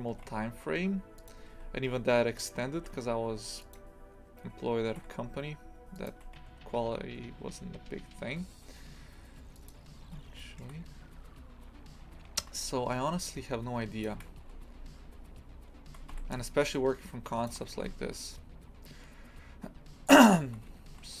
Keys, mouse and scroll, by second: 0.1 g, 2.8 g, 10.0-10.4 scroll up 2, 10.4-12.4 shift+middle drag, 12.4 a, 14.0 shift+click, 14.4 s, 17.4 shift+click, 17.7 s, 20.9 a, 21.1-21.2 scroll down 5.